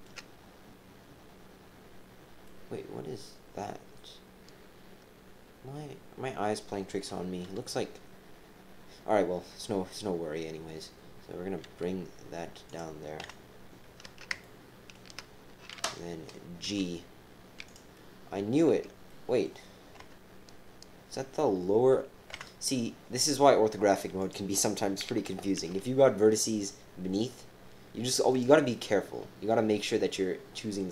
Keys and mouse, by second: 0.0 shift+KP_1, 2.4-6.5 right drag, 7.0 KP_1, 11.6 e, 13.2 KP_7, 14.3 shift+middle click, 14.8 shift+click, 16.6 g, 17.9 click, 19.1 click, 20.0 KP_7, 21.3 click, 22.3 KP_7, 24.2 click, 25.5 g, 30.1 click.